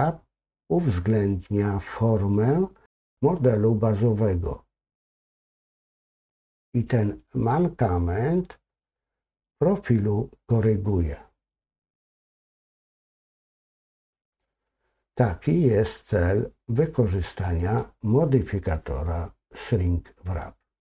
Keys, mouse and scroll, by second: 5.6 click, 11.7 scroll down 1, 12.2-14.4 middle drag, 19.6-20.8 middle drag.